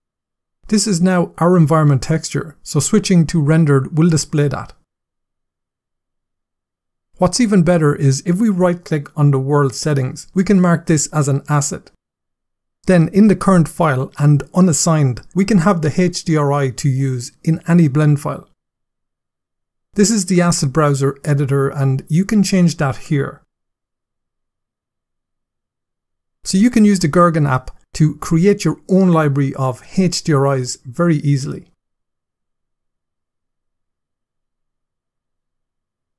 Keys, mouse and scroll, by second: 3.0 click, 4.8 middle click, 8.6 right click, 10.8 click, 13.2 click, 13.9 click, 14.8 click, 15.9 click, 19.2 click, 21.2 click, 22.6 click, 23.6 click, 24.7 click, 25.8 click, 27.9 click, 28.9 click, 29.7 click, 30.3 click.